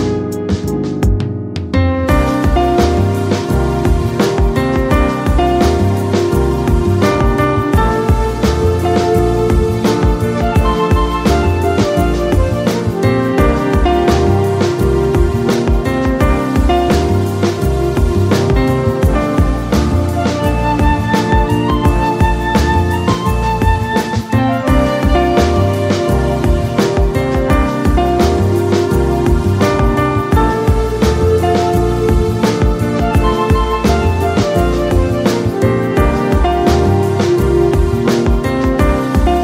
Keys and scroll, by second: 7.5 space, 8.9 Return, 11.5 ctrl+t, 27.3 ctrl+z, 28.5 Return, 34.7 j, 34.9 a, 35.7 ctrl+a, 37.5 ctrl+a, 37.7 j, 39.1 j.